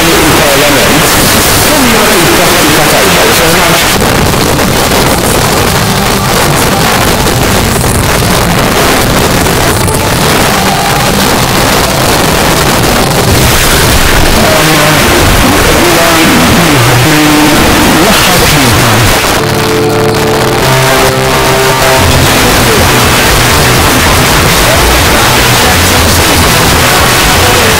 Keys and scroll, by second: 3.8 Page_Down, 19.1 Page_Down.